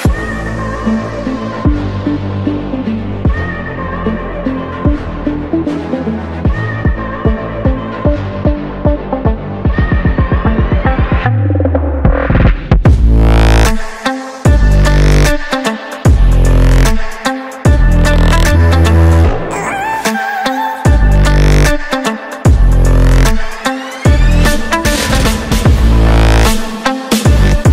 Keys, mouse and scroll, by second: 0.4 click, 1.2 click, 2.8 click, 5.1 click, 5.9 click, 6.8 click, 7.8 click, 9.6 click, 10.4 click, 13.5 click, 14.3 click, 15.4 click, 15.6 click, 15.9-16.8 typing, 18.4 Tab, 22.6 click, 24.5 click, 25.3 click, 26.3 click, 26.6 click, 26.8-27.7 typing.